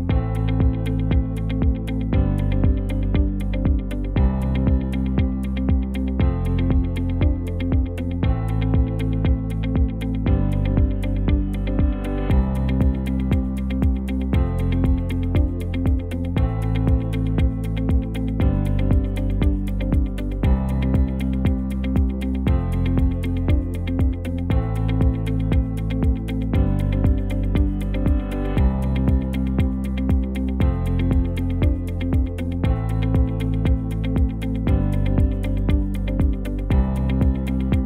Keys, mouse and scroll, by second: 1.7 KP_0, 4.2 Tab, 6.4 g, 8.7 Tab, 9.1 space, 12.7 space, 20.5 ctrl+z, 27.3 space, 30.2 space, 34.5 space, 35.8 space, 37.3 BackSpace.